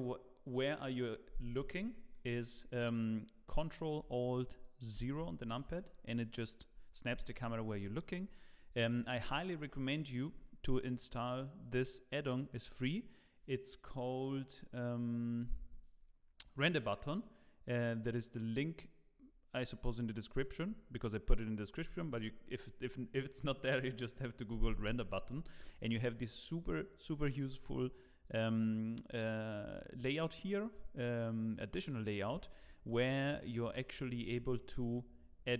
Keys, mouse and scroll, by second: 0.0-0.6 scroll up 1, 1.8 middle click, 4.9 ctrl+alt+KP_0, 11.6 click, 33.7 middle click, 34.2 scroll down 3, 34.4 middle click, 35.0-35.3 scroll up 2, 35.4 shift+middle click.